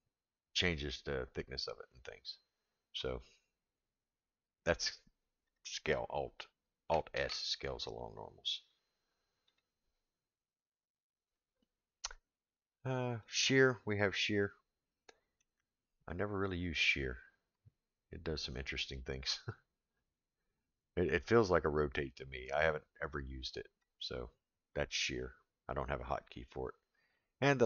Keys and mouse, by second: 7.1 alt+s, 13.2 click, 14.2-15.4 middle drag, 17.6-23.8 drag.